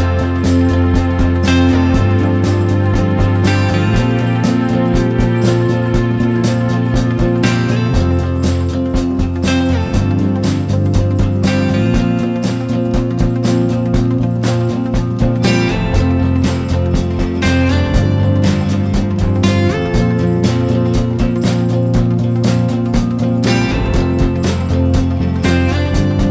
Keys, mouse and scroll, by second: 2.2 Down, 2.7 Down, 5.9-7.0 drag.